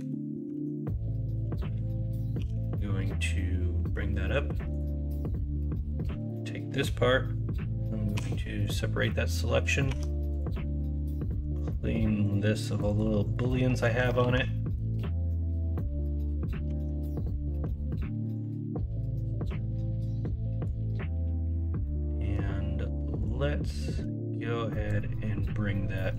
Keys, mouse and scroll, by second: 0.5 alt+z, 2.3 e, 5.9 3, 8.1 p, 9.0 middle click, 9.9 Tab, 12.8-13.8 drag, 13.8 middle drag, 14.2 alt+z, 14.4 middle drag, 16.6 Tab, 17.2 click, 17.6 l, 19.6-20.6 drag, 20.9 middle click, 21.9 middle click.